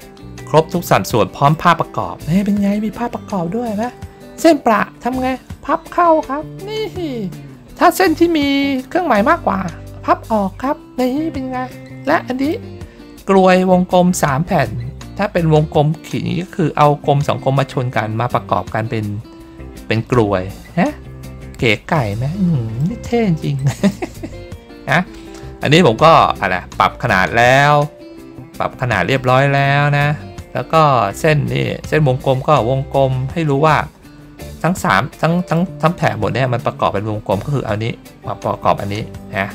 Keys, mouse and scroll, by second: 0.2 ctrl+middle click, 1.0 middle click, 1.7 ctrl+scroll up 1, 2.7-3.1 ctrl+scroll down 1, 11.9 middle click, 20.9-21.5 ctrl+scroll up 1, 22.0 middle click, 23.5 middle click, 24.4 ctrl+middle click, 25.8 ctrl+middle click, 26.3 middle click, 28.0 ctrl+middle click, 29.0 middle click, 29.9 ctrl+scroll up 1, 30.9 ctrl+scroll up 1, 34.1 ctrl+middle click, 35.1 middle click, 39.2 middle click.